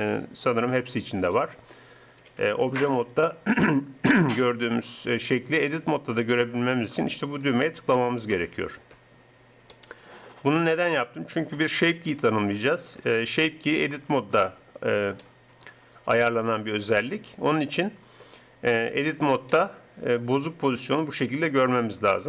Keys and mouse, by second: 2.6 Tab, 6.0 Tab, 7.3-9.1 drag, 9.7 click, 14.2-15.2 middle drag, 17.0-19.5 middle drag.